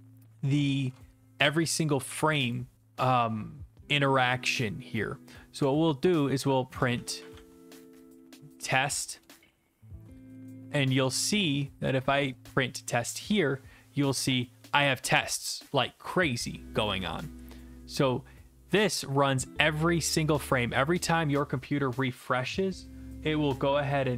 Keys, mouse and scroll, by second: 2.5 click, 5.6 Return, 6.7-10.0 typing, 10.3 ctrl+s, 11.9 click, 16.8 alt+F4, 17.9-18.9 scroll, 20.0 scroll.